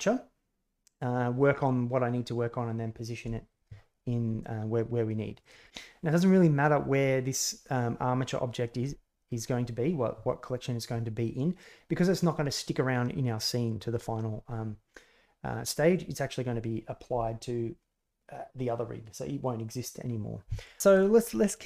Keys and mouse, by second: 5.3 click.